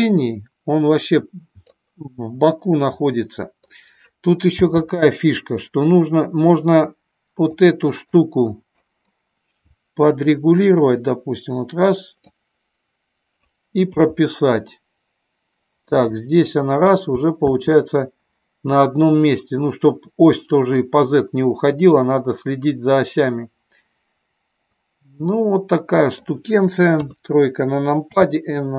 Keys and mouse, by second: 2.7-3.7 middle drag, 4.7 n, 7.6 click, 8.2 click, 10.0-12.4 drag, 14.0 i, 16.0 click, 17.5 space, 20.7-22.1 middle drag, 24.7-26.4 middle drag, 27.0 KP_3, 28.2 n.